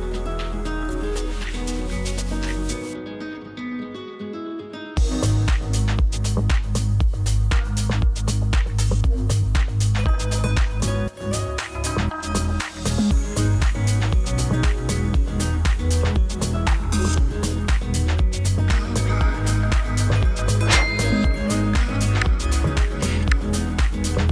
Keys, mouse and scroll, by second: 0.4-4.8 drag, 5.0 click, 9.2 space.